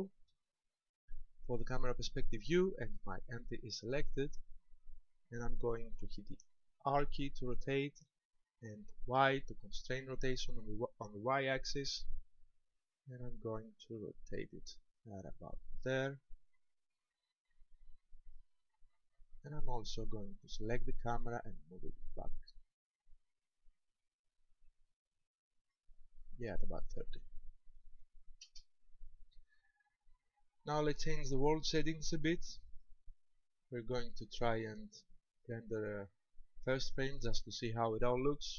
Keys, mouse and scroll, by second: 0.2 KP_0, 7.0 r, 18.4 ctrl+click, 20.7 right click, 21.9 click, 26.4 click, 32.7 click, 33.8 click.